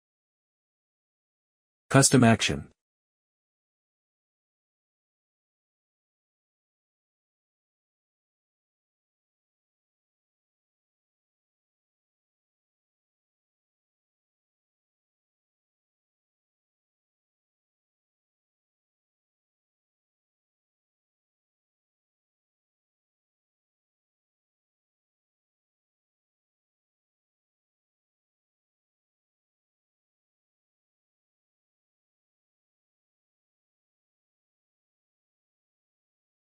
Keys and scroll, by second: 8.7-12.1 typing, 12.4 Left, 12.7 Return, 12.9 Right, 13.0 Return, 13.0 Up, 13.2 Right, 13.3 Return, 13.6 ctrl+s, 14.3-21.8 typing, 15.3 Right, 21.9 Return, 22.3 Right, 22.5 Up, 22.7 Return, 22.9-36.5 typing, 32.5 Right.